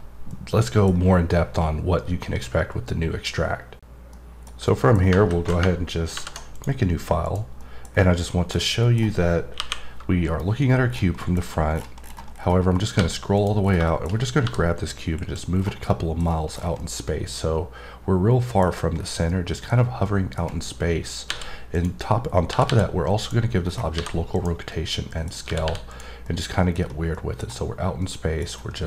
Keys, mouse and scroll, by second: 0.3 middle click, 4.6 middle click, 6.5 click, 7.2 click, 7.6 middle click, 7.9 scroll down 1, 8.2 middle click, 8.4-8.8 scroll down 3, 8.8 middle click, 10.9-12.3 scroll down 12, 11.2 middle click, 12.7-13.3 scroll up 3, 13.3 click, 13.6 scroll down 2, 13.8 middle click, 14.0 scroll up 2, 14.7 click, 15.5-15.8 scroll down 3, 15.8 middle click, 16.2 scroll down 3, 16.8-18.6 middle drag, 18.6-19.3 scroll up 5, 19.3 middle click, 19.7 scroll up 2, 20.0 middle click, 20.6-21.7 scroll up 1, 21.7 click, 23.1 click, 23.7-24.3 scroll down 3, 24.3 click, 24.7 middle click, 25.2-25.9 scroll down 2, 25.9 click, 26.2 middle click, 26.8 scroll down 3, 27.1 middle click, 27.4-28.0 scroll up 1, 28.0 middle click, 28.4 scroll up 2, 28.7 middle click.